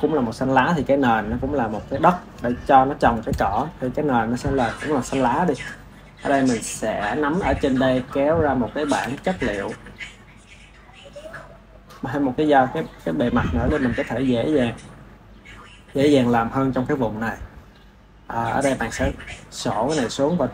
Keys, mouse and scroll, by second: 1.0 click, 3.8-6.3 shift+middle drag, 6.3 click, 7.7-9.1 drag, 10.2-13.7 drag, 17.5-20.5 drag.